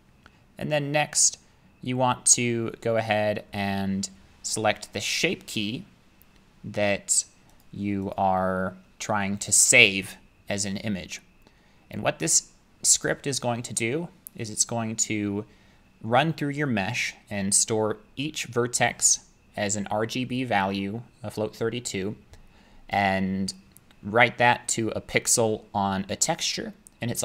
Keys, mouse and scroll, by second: 7.6 click, 8.0 click, 8.1 click, 12.1-13.3 drag.